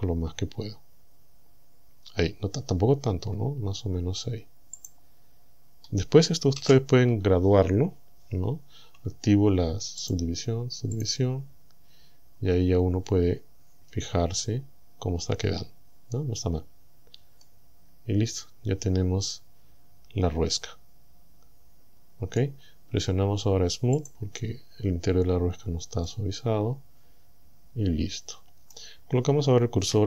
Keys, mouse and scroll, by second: 4.8 click, 5.4-5.8 scroll up 2, 5.8 scroll down 2, 6.6 a, 10.1 click, 11.0 click, 12.4-12.8 scroll down 1, 14.0 Tab, 15.0-15.6 scroll up 1, 16.6 scroll down 2, 17.4-22.6 middle drag, 24.0 click, 25.4-25.7 scroll down 2, 26.1-28.9 middle drag, 29.2 scroll down 2.